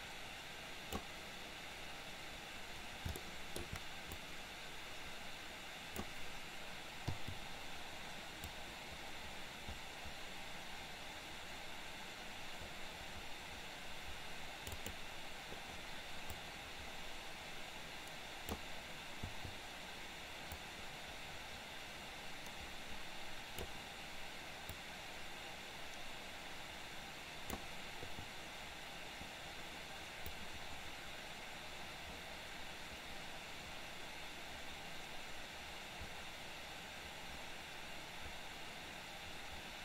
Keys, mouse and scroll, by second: 3.3-3.8 shift+middle drag, 4.3-6.1 drag, 7.1 i, 8.6-14.9 drag, 16.5-18.8 drag, 20.8-23.9 drag, 25.0-27.6 drag, 30.5-39.8 drag.